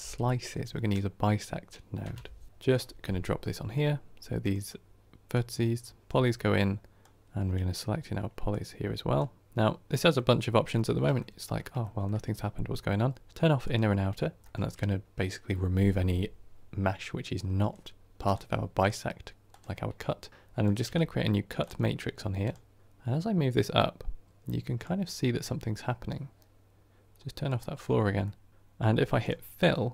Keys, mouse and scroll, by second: 6.0-10.7 drag, 10.7-13.1 shift+middle drag, 13.1-14.4 drag, 14.4-22.3 shift+middle drag, 22.3 click, 22.8-28.1 drag, 28.1-28.5 middle drag, 28.5-29.1 scroll up 1, 29.1 click, 29.8-29.9 middle drag.